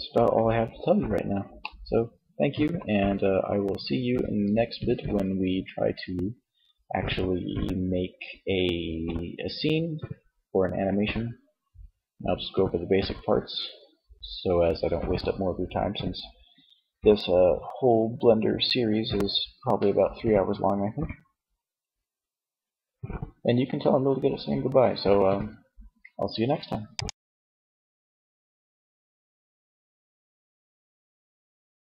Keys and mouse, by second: 27.3 Tab.